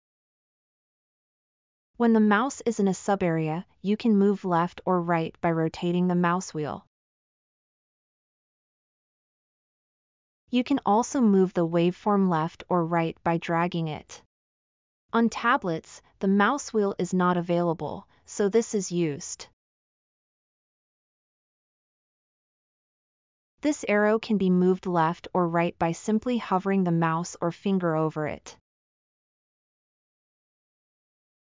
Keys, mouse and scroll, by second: 3.8-4.5 scroll up 2, 4.9-6.8 scroll up 8, 6.8-7.9 scroll up 2, 8.1-9.0 scroll up 4.